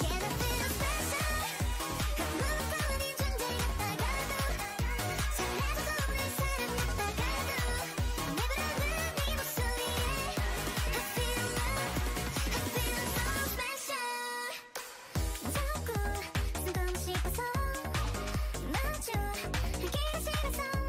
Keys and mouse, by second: 1.5-3.3 right drag, 2.5 e, 3.2 e, 5.7 e, 6.5 e, 10.0 middle click, 10.9 g, 12.8 shift+Tab, 16.1 g, 17.2 right click, 17.2-19.0 drag, 17.3 g, 18.5 g, 20.4 g.